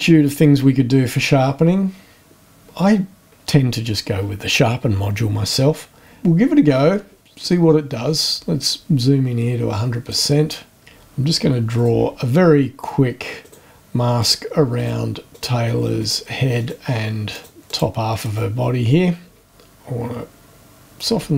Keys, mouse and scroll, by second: 7.7-8.3 scroll up 4, 10.1 click, 11.7 click, 13.4 click, 14.2 click, 14.8 click, 15.3 click, 16.0 click, 16.6 click, 17.3 click, 17.7 click, 18.2 right click, 20.0-21.0 shift+scroll down 6.